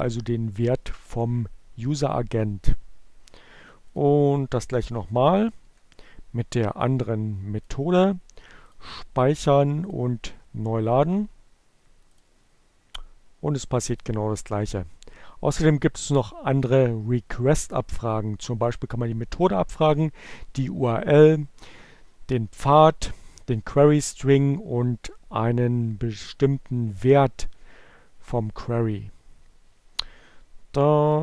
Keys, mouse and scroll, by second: 1.8 click, 4.2 click, 5.8 Delete, 6.9 click, 8.5 click, 9.8 click, 12.1 click, 13.1 click, 28.7 Down, 29.1 Left, 30.8 click.